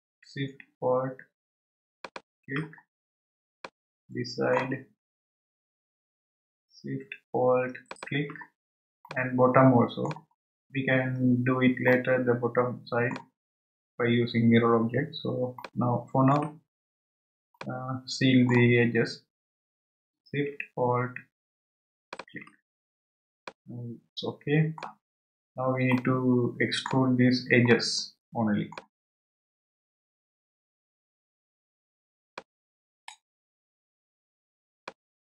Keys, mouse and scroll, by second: 2.0 alt+shift+click, 2.9 scroll down 2, 3.5 scroll down 1, 3.6-5.1 middle drag, 5.1-6.4 scroll up 8, 6.4-7.2 scroll up 1, 7.9 alt+shift+click, 9.1-10.3 middle drag, 10.3-10.9 scroll down 7, 11.9-13.5 middle drag, 13.5 scroll up 2, 15.6-16.8 shift+middle drag, 16.8 scroll up 3, 17.5-19.1 shift+middle drag, 19.1-19.7 scroll up 3, 22.1 alt+shift+click, 23.4-25.1 middle drag, 25.1-25.9 scroll down 3, 25.9-29.5 middle drag, 29.5-31.1 scroll up 3, 32.3-35.1 shift+middle drag, 35.1 scroll down 1.